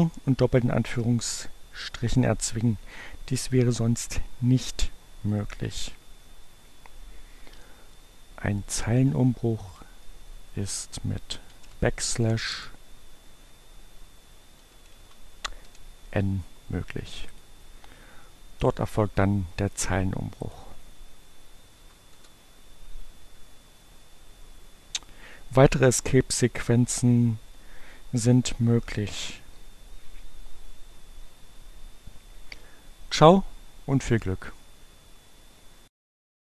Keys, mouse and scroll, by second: 9.2 click, 10.5 alt+., 11.8 BackSpace, 13.5 e, 15.4 n, 17.2 click, 20.4 click, 20.9 Up, 22.0 Return.